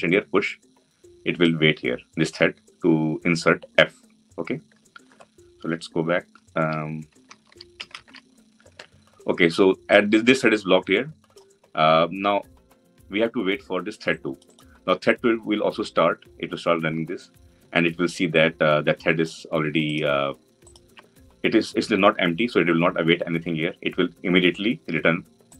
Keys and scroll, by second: 7.0 ctrl+alt+Left, 20.4 ctrl+b.